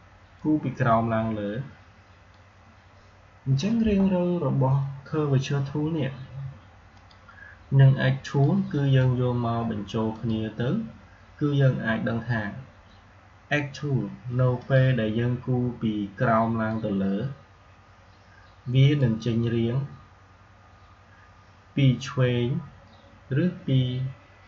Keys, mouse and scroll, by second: 0.2-4.8 drag, 6.8-10.0 drag, 14.4-21.4 drag.